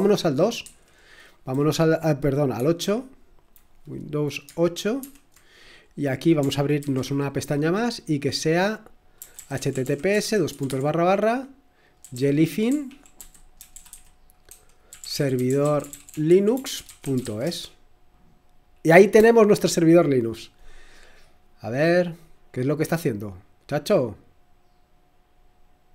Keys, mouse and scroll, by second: 0.0 super+2, 0.6 super+1, 2.5 F8, 5.0 super+8, 6.8 ctrl+t, 8.9-17.9 typing, 19.4-20.8 typing, 23.2-24.4 drag.